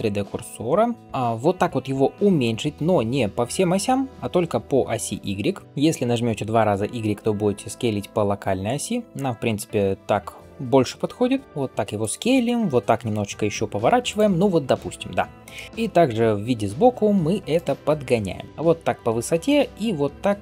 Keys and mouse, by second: 0.4 r, 2.6 s, 5.6 s, 12.7 r, 15.7 KP_3, 16.3 g, 19.3 shift+right click, 19.5-20.4 shift+middle drag.